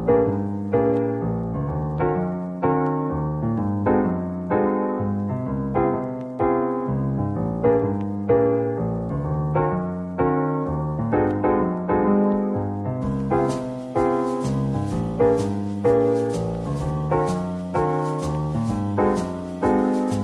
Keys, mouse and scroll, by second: 9.1-11.8 scroll down 1, 12.5 Tab, 13.9 ctrl+l, 17.4 Tab, 18.3 click.